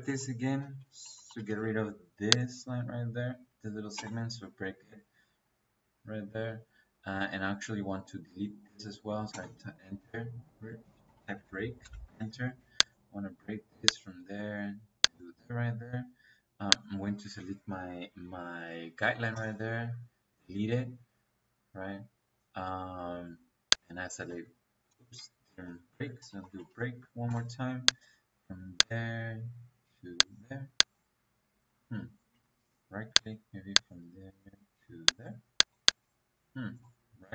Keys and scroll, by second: 0.0-1.6 typing, 0.5 Escape, 3.9 space, 9.2 space, 10.3 Escape, 10.9-12.0 typing, 19.2 Delete, 25.2 Escape, 26.1-27.1 typing, 31.6 Escape, 36.3 Escape, 37.1 Escape.